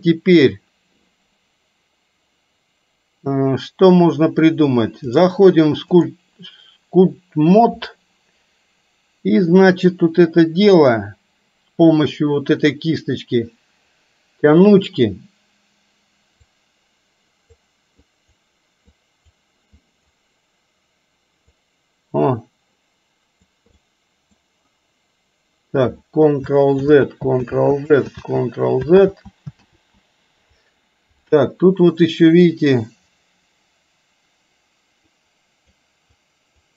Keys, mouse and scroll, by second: 5.2-6.2 drag, 16.5-17.7 drag, 18.2 click, 18.9 click, 19.8 click, 21.5-23.5 drag, 23.8 middle click, 26.9 ctrl+z, 27.5 ctrl+z, 28.2 ctrl+z, 29.0 ctrl+z, 29.7 ctrl+z, 35.3 click, 36.2 click.